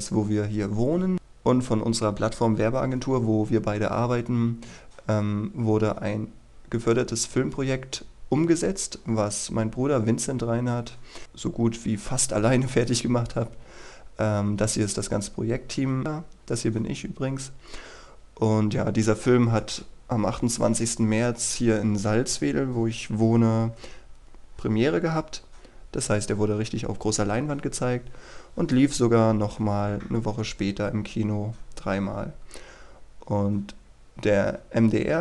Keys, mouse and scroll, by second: 13.1-14.9 scroll up 1, 17.5-19.5 scroll down 1.